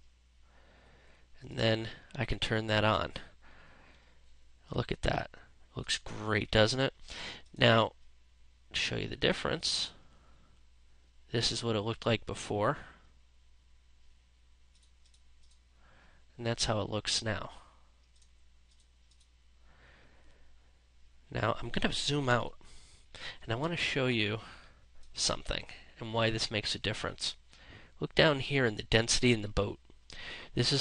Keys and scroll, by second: 2.5 space, 21.7 ctrl+-, 23.7 space.